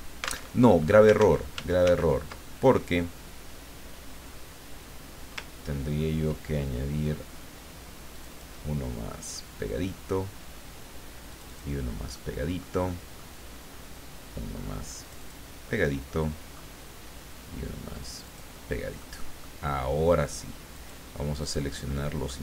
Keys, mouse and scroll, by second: 0.5 alt+Tab, 1.2 ctrl+z, 5.6-6.1 ctrl+scroll up 2, 8.1 click, 8.9-9.5 scroll down 4, 11.3 click, 12.1-13.8 middle drag, 15.0 click, 15.9-17.0 middle drag, 18.1 click, 19.0-20.1 middle drag, 20.7 click, 21.4 click, 21.9 middle click.